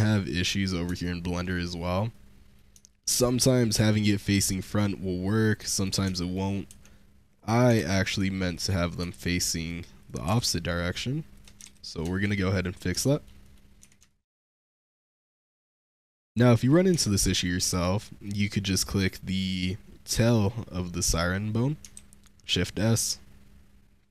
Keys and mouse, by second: 0.9-1.3 shift+middle drag, 2.0-2.4 middle drag, 2.8-3.2 shift+middle drag, 3.2-3.5 drag, 3.5-5.6 middle drag, 5.6 click, 5.7-6.2 shift+middle drag, 6.5 Tab, 7.2 click, 7.6 shift+s, 7.9 Tab, 8.5 click, 8.9 Tab, 9.3-9.9 middle drag, 9.9 click, 10.0 middle click, 10.1 r, 10.3 z, 11.2 ctrl+click, 11.7 shift+s, 12.0 shift+click, 12.5 click, 13.0 shift+click, 13.3 click, 13.7 Tab, 13.9 shift+click, 14.9-15.2 drag, 15.6 click, 15.9 Tab, 16.5 click, 16.9-17.3 shift+middle drag, 17.5 click, 21.8 shift+s.